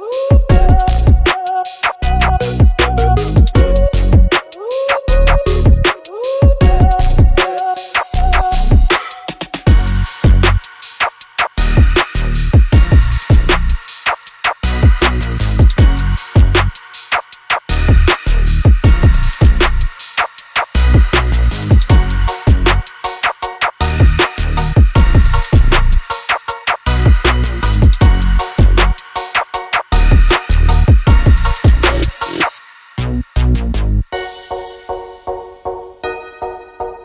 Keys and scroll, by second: 0.1 space, 2.2 e, 7.2 l, 12.1 space, 13.0 Delete, 21.7 space, 22.1 p, 24.1 space, 25.1 m, 26.1 Up, 27.0 space, 28.9 e, 31.2 l, 34.0 space, 34.7 Delete.